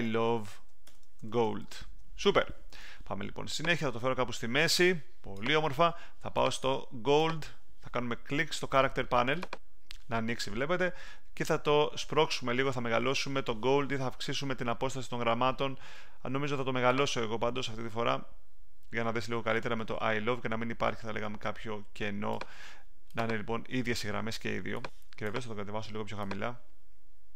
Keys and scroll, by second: 0.0-2.2 typing.